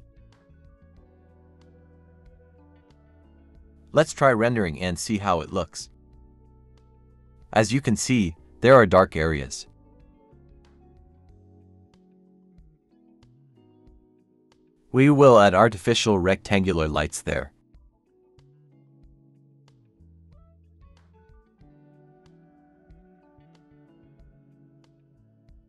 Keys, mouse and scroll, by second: 0.0-0.8 scroll down 1, 2.2-3.0 scroll up 1, 9.1-9.8 scroll down 1, 18.5 Escape, 19.8 Escape.